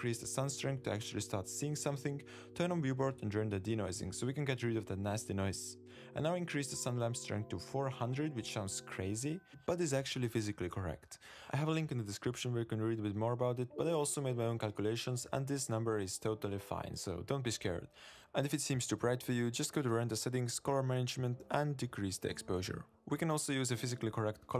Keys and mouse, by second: 1.0 click, 1.3 super+s, 2.4 drag, 3.4 click, 3.7-4.3 drag, 4.5 click, 6.9 click, 7.5-9.8 drag, 8.8 0, 11.3 ctrl+b, 19.5 click, 20.4 click.